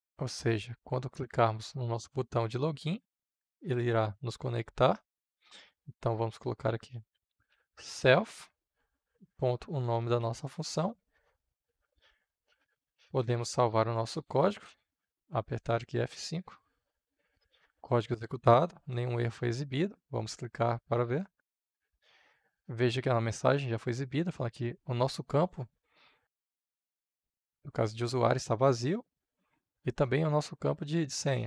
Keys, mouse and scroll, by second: 6.7-7.9 typing, 9.1 >, 10.1 ctrl+v, 11.5 click, 12.4 ctrl+s, 13.4-15.6 middle drag, 15.6 click, 16.0 F5, 18.7-31.4 drag.